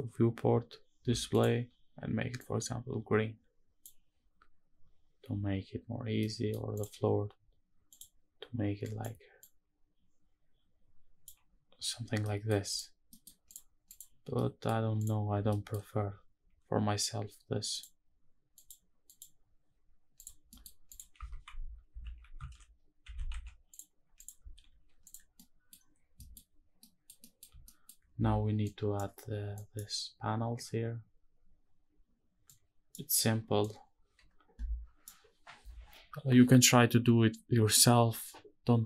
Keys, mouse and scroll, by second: 1.0 click, 5.9-6.2 middle drag, 6.5 click, 7.6 click, 12.0 middle click, 12.4 click, 12.8 middle click, 13.2 click, 13.5 click, 14.0 scroll down 1, 14.0-14.4 middle drag, 14.7 click, 15.2 middle drag, 15.5 scroll up 1, 17.4 click, 19.9 click, 20.2 middle click, 20.6 click, 21.0 shift+`, 23.9 click, 24.4 alt+h, 24.7 click, 25.0-25.4 middle drag, 25.5 scroll down 1, 25.9 shift+middle click, 26.5 middle click, 26.9 middle click, 27.4 shift+middle click, 29.5 shift+middle click, 29.5-31.3 scroll down 1, 33.8 scroll down 1.